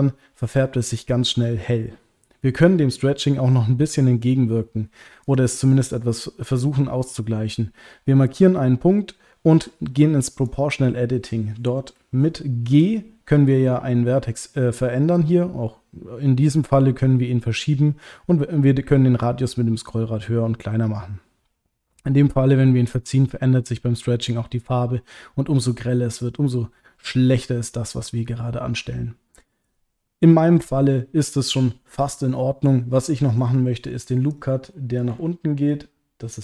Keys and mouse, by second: 10.4 click, 33.1 middle click, 33.9 middle click, 34.7 middle click, 35.2 ctrl+middle click, 36.3 click.